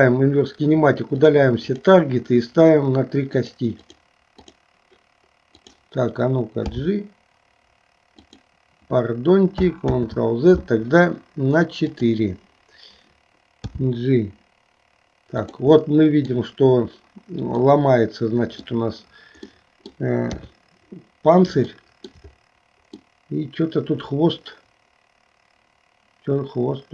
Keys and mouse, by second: 1.8 click, 3.4 click, 4.0 click, 4.6 click, 5.6 click, 6.8 g, 10.0 ctrl+z, 11.9 click, 13.8 g, 16.0 middle click, 17.7-18.8 middle drag, 19.6 middle click, 20.4 KP_3, 21.8 shift+middle click, 23.1-26.9 middle drag.